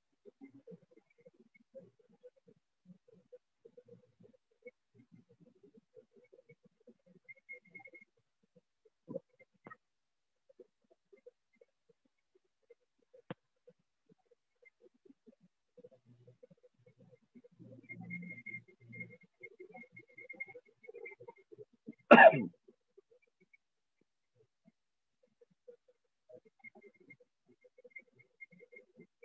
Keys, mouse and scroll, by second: 6.5 click, 7.5 click, 8.5 click, 9.5 ctrl+z, 10.5 click, 13.5 click, 15.7 click, 15.8 click, 16.5 click, 16.7 click, 17.0 click, 18.5 click, 20.7 click, 21.7 alt+click, 22.2 click, 22.7 alt+click, 23.0 alt+click, 23.2 alt+click, 23.5 alt+click, 23.8 click, 24.0 alt+click, 24.3 alt+click, 24.6 alt+click, 25.0 alt+click, 25.2 alt+click, 25.8 click, 26.0 alt+click, 27.6 click, 27.9 click, 28.6 alt+click.